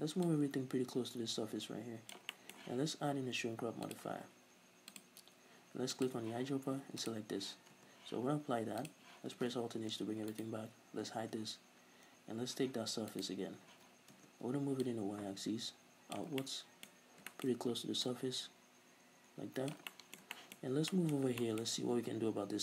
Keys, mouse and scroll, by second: 0.2-2.3 drag, 2.3-3.8 middle drag, 3.8-6.0 drag, 7.7 Tab, 8.8 click, 9.8 alt+h, 10.3 right click, 11.2 h, 12.5 z, 13.1 right click, 13.7 z, 14.1 Tab, 14.8-16.4 drag, 16.4-18.0 middle drag, 16.9-17.3 scroll up 2, 18.0-19.9 drag, 19.9-22.6 middle drag, 20.6-20.9 scroll up 2, 22.0-22.6 scroll down 2.